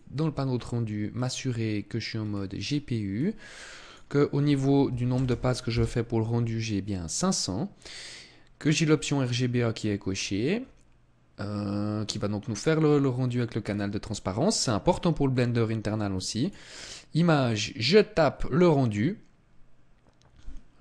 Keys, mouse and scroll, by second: 0.5 scroll down 1, 1.6-2.2 scroll down 6, 2.5-2.9 scroll down 1, 3.2 click, 8.9-11.3 scroll up 10, 11.3 scroll down 1, 11.5 scroll down 1, 12.2-12.8 scroll down 2, 12.8-13.8 scroll up 5, 13.8 scroll up 1, 15.6 click.